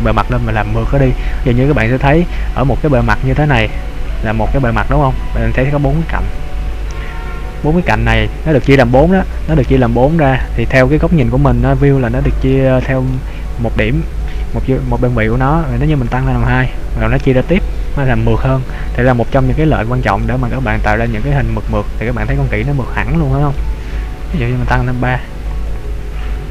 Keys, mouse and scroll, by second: 1.8-2.5 scroll up 1, 2.6-3.0 scroll up 3, 3.0 shift+middle click, 3.7 middle click, 9.8 middle click, 10.6-12.6 scroll down 2, 12.6 middle click, 16.5 click, 17.3 middle click, 19.5-20.3 scroll down 5, 20.2 middle click, 20.2 scroll up 1, 21.4-22.3 scroll up 2, 22.3 scroll down 1, 22.9 middle click, 25.7 click.